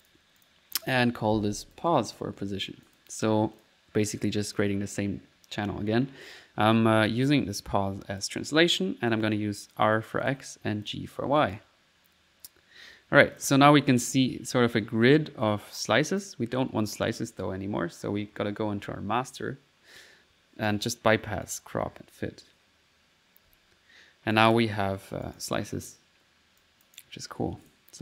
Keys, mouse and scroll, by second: 0.1 alt+click, 2.4 middle click, 2.9 click, 3.6 click, 4.6 click, 7.2-8.3 drag, 9.1 click, 9.7 click, 10.3 click, 10.9 click, 11.4 click, 11.7 middle click, 13.4 click, 13.9 ctrl+click, 14.4 ctrl+s, 15.9 ctrl+click, 17.4 middle click, 20.7 click, 21.5-22.7 drag, 23.5 1, 24.4 click, 25.3 click, 25.8 middle click, 26.7 click, 27.7 click.